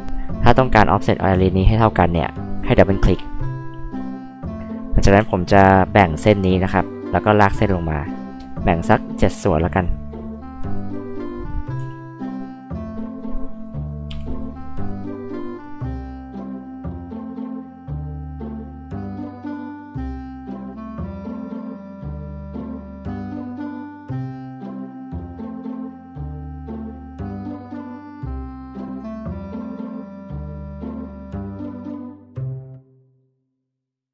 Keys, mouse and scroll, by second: 5.2 space, 5.7 click, 6.1 right click, 7.3 click, 11.0 click, 11.7 l, 13.4 click, 14.1 Escape, 14.7 click, 14.9 scroll up 2, 15.5 click, 15.7 scroll up 2, 16.5 click, 16.6 scroll down 2, 16.9 click, 17.4 click, 18.0 click, 18.6 click, 19.1 click, 20.0 click, 20.4 click, 21.1 click, 21.2 scroll up 1, 21.5 Escape, 22.0 click, 22.3 click, 22.5 scroll up 2, 22.6 scroll down 2, 22.8 scroll up 2, 22.8 space, 23.3 click, 23.5 click, 24.2 right click, 24.7 click, 26.4 click, 27.9 ctrl+z, 28.1 right click, 28.5 click, 29.1 KP_7, 30.1 l, 30.8 click, 31.2 click, 32.3 click, 32.8 click, 33.4 click, 33.9 click.